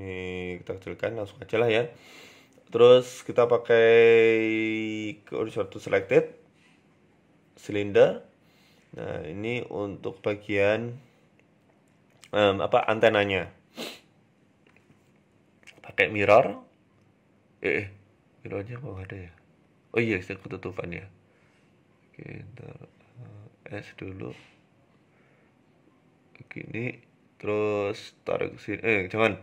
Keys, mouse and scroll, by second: 0.4 Tab, 0.6-0.9 scroll down 5, 0.9-1.2 scroll up 6, 1.8 shift+a, 4.1 shift+s, 5.0 shift+a, 7.6-9.1 scroll down 5, 7.8 s, 9.1-9.6 scroll up 6, 9.5 shift+middle click, 10.4 g, 11.6 s, 12.2 Tab, 12.5 click, 13.2 scroll up 3, 13.4 shift+middle click, 13.9 a, 14.3 g, 15.5 click, 17.5 r, 18.0 s, 19.4 click, 20.3 ctrl+z, 20.6 ctrl+z, 21.1 ctrl+z, 21.5 click, 22.5 a, 23.2 s, 24.6 click, 25.0 scroll down 2, 25.1 shift+middle click, 25.5 g, 27.0 click, 28.0 g.